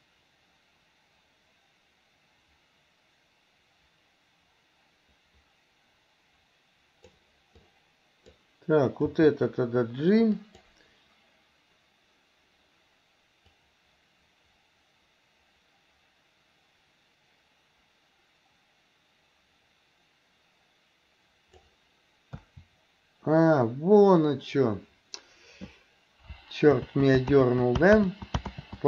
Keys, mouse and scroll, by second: 7.6 click, 9.1 g, 13.6-21.7 drag, 22.5 a, 26.4 ctrl+click, 26.8 ctrl+z, 27.4 ctrl+z, 28.0 ctrl+z, 28.6 ctrl+z.